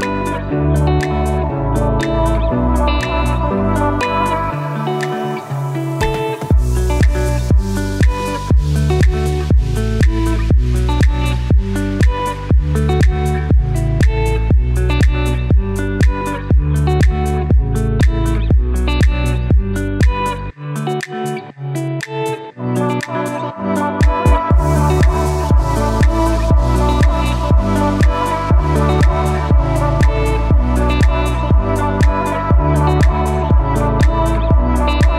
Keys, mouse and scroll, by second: 0.7-2.3 typing, 3.2 click, 10.1-13.6 shift+drag, 13.9 right click, 14.6 click, 14.8-15.7 typing, 15.1 click, 15.7 click, 20.9 scroll up 1, 21.2-22.6 typing, 21.6 click, 22.0 click, 22.4 click, 22.7 click, 25.2 right click, 26.3-34.2 drag.